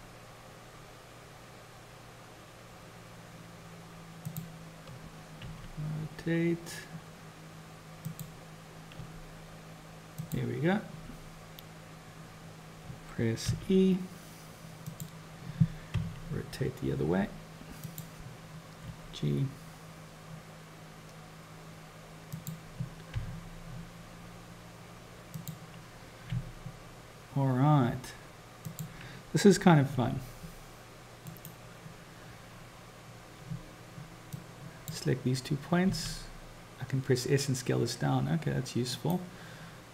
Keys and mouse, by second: 5.5 r, 9.0 g, 13.6 e, 16.0 r, 18.9 g, 23.2 r, 26.4 g, 30.0 s, 34.6 click, 35.9 s.